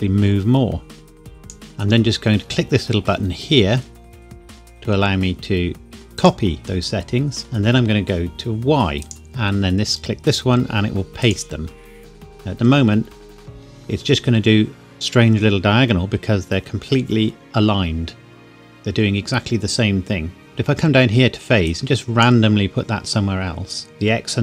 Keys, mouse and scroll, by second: 6.1 click, 9.0 click, 11.2 click, 21.6 click, 21.9 click.